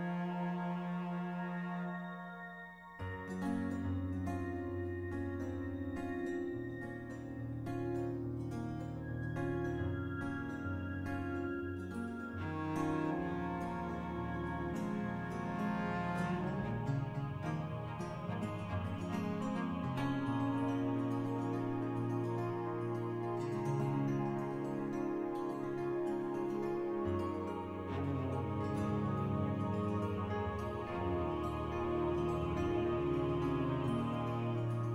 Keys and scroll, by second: 3.2 s, 5.7 s, 9.1 4, 12.9 ctrl+z, 15.8 2, 18.0 3, 20.5 s, 22.2 s, 23.8 s, 25.2-26.1 typing.